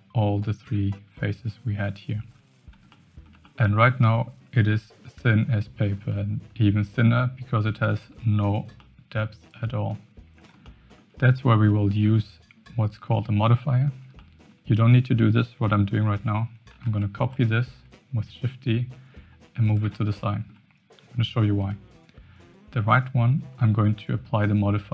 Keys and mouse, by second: 2.9-3.3 shift+middle drag, 3.5-4.0 middle drag, 4.7 shift+middle drag, 6.0-8.2 middle drag, 8.8-10.0 middle drag, 10.6 shift+middle click, 14.2 shift+middle drag, 16.8 shift+d, 20.3 shift+middle click, 21.5 click.